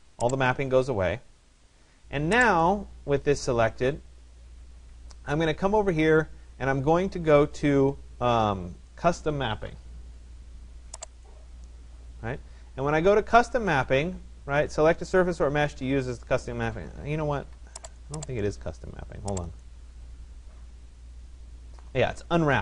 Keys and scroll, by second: 16.4 Escape, 22.0 Escape.